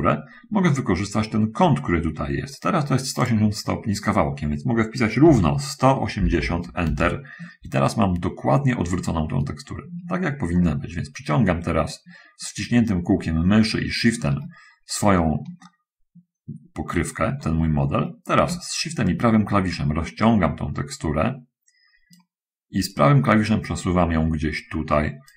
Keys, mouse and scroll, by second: 3.6 click, 5.3 1, 6.5 8, 6.8 Return, 6.8 0, 10.8-14.3 shift+middle drag, 19.4-22.6 shift+right drag, 23.2-25.3 right drag.